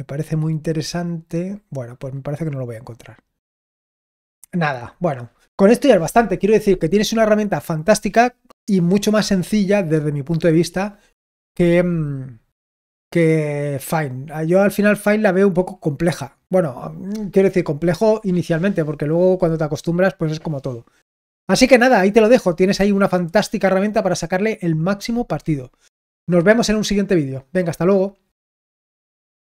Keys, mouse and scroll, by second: 3.7-4.2 scroll down 1, 4.2 scroll down 1, 4.5-12.7 scroll up 2, 12.7-15.1 scroll down 2, 15.1-29.4 scroll down 1, 29.4 click.